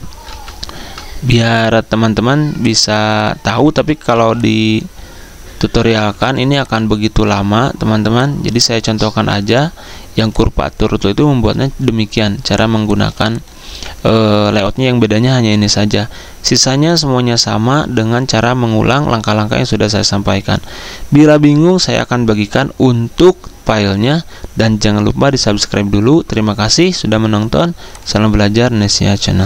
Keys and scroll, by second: 0.2-1.2 typing, 4.1 z, 6.0 ~, 12.5-14.2 typing.